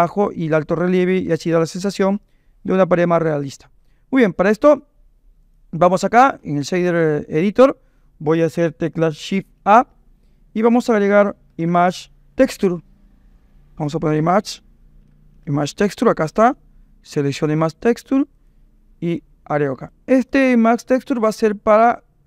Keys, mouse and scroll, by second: 8.8 click, 9.6 shift+a, 14.2 BackSpace, 19.1 click, 20.7 click.